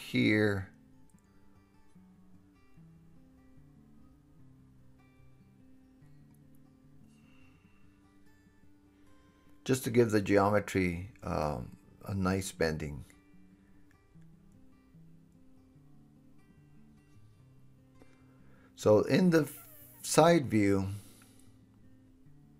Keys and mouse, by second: 0.5 KP_7, 1.0 super+r, 3.1 s, 4.1 g, 6.9 2, 7.2 3, 7.7 1, 9.0 Tab, 9.2 middle click, 9.2 right click, 9.7 alt+z, 10.3 click, 10.5-11.9 middle drag, 11.9-13.4 drag, 12.7 alt+z, 13.7 click, 13.8-15.3 right drag, 15.3-16.0 middle drag, 16.0-19.1 right drag, 19.6 KP_3, 20.3-22.5 drag.